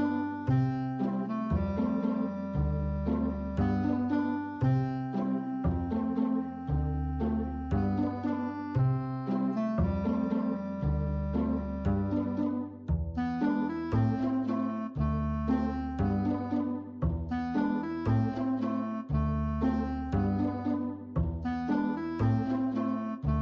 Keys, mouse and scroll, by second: 0.0 click, 0.1 e, 0.2 click, 0.5 click, 3.1 b, 3.4 click, 4.0 click, 5.3 p, 5.4 click, 6.1 e, 6.2 click, 7.4 space, 9.0 p, 9.9 click, 10.8 h, 12.2 space, 12.3 click, 12.6 h, 15.9 p, 16.9 click, 17.8 click, 18.7 click, 22.4 click.